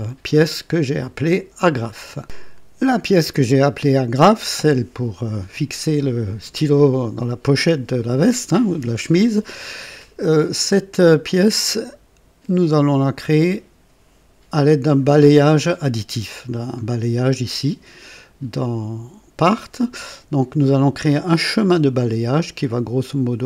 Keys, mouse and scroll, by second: 2.2 click.